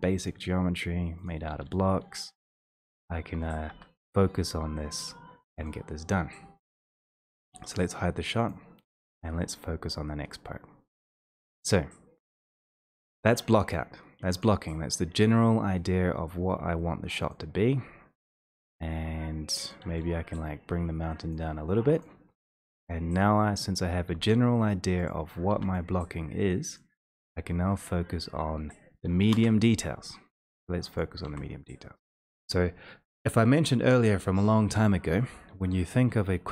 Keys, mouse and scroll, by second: 0.4 click, 1.3 click, 1.9 w, 2.3 click, 3.1 click, 3.9 1, 5.7 click, 7.8 click, 8.6 click, 11.1 click, 12.9 shift+click, 14.5 click, 22.0 click, 22.0 w, 22.6 e, 23.7 click, 24.2 shift+d, 25.2 click, 25.6 e, 26.8 click, 27.3 w, 32.4 click, 32.4 c.